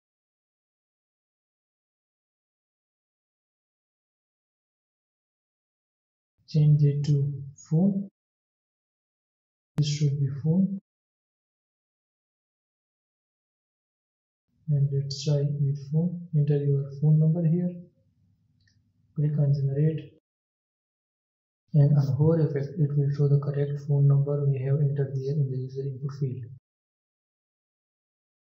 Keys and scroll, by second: 0.5 ctrl+c, 2.0 ctrl+v, 7.2 ctrl+d, 13.8 ctrl+s.